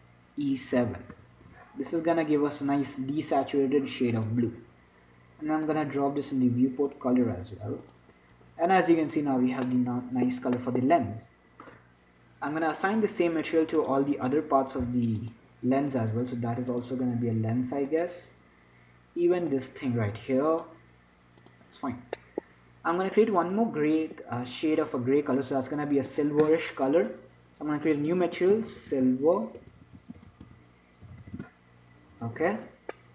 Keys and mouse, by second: 4.4-7.9 drag, 8.1-13.1 drag, 9.7 Tab, 10.6 Tab, 13.1 middle click, 14.0-17.1 drag, 19.7-25.2 drag, 26.4-29.2 drag, 30.0 BackSpace, 30.1 BackSpace.